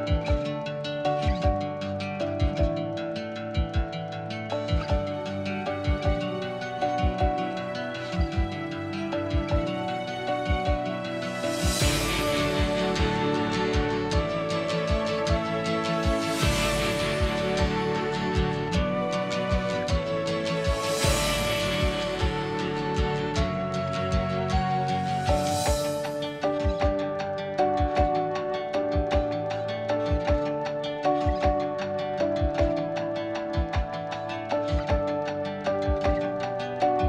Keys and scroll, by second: 1.9 r, 3.2 ctrl+z, 5.6-7.7 typing, 7.4 ctrl+g, 8.8 Escape, 8.9 Escape, 9.7 ctrl+g, 10.3 b, 10.8 Escape, 11.7 Escape, 23.5-25.2 typing, 27.7 p, 28.5 space, 29.0 ctrl+g, 29.6 m.